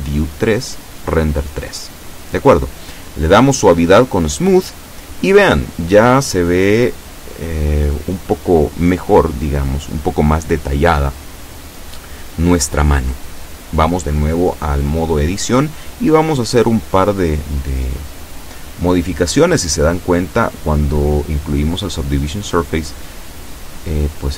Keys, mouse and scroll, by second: 1.8 click, 2.6-9.8 middle drag, 10.4 Tab, 11.2 scroll up 2, 11.5-13.2 scroll down 2, 13.2-14.2 middle drag, 14.7 KP_7, 16.4 shift+middle click, 17.4 shift+scroll up 2, 17.7 shift+scroll down 2, 17.8 shift+middle click, 21.0 b, 21.3 click, 23.6 g.